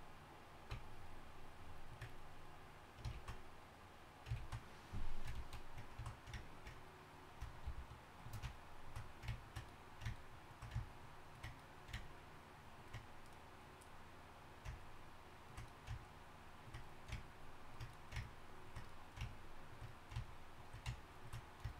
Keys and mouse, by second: 3.5 ctrl+z, 4.7 ctrl+z, 5.7 ctrl+z, 7.7 shift+f.